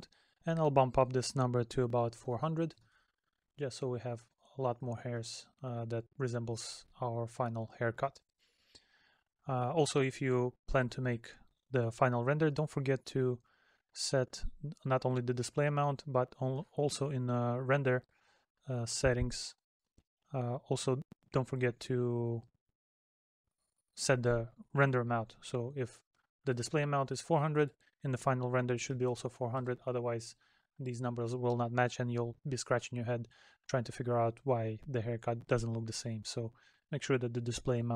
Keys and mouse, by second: 3.7 middle click, 6.9 middle click.